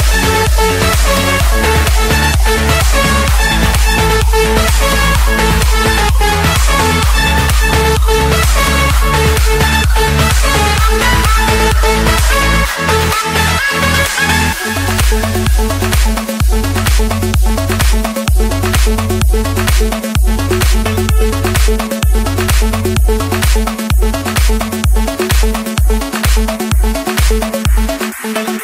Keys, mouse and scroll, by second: 0.4 scroll, 0.8-1.4 scroll down 1, 1.7-2.5 scroll up 2, 2.5-3.0 scroll up 1, 3.0-3.6 scroll up 1, 3.6-4.1 scroll up 1, 5.2-6.1 scroll down 1, 8.0 a, 8.8 Return, 11.4-12.5 drag, 13.4-14.4 drag, 14.7 F8, 23.4 typing, 25.7-26.4 typing, 27.2 Return.